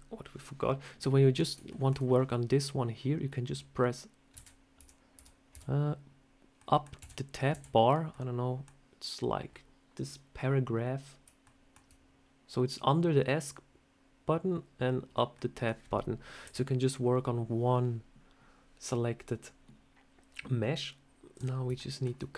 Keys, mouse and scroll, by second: 1.6 shift+middle click, 4.2 Tab, 4.2 /, 4.6 Tab, 5.0 Tab, 5.4 Tab, 6.5 middle click, 6.6 /, 6.9 /, 7.4 /, 8.0 middle click, 11.3 shift+middle click, 15.2 middle click, 16.3 KP_7, 21.2 click, 21.5 scroll up 1, 21.6 shift+middle click.